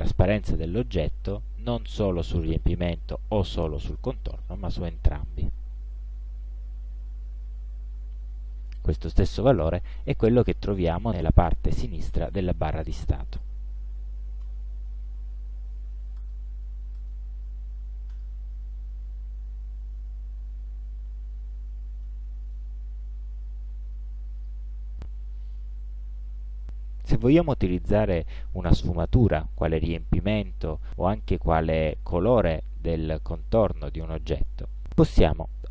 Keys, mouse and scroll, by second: 4.4-9.4 drag, 13.2 click, 14.1 KP_5, 14.2 KP_0, 14.5 Return, 16.3 click, 17.1 right click, 18.2 click, 19.7 scroll down 2, 20.7 ctrl+scroll down 2, 21.4 ctrl+scroll up 2, 22.1 ctrl+middle click, 24.5 click.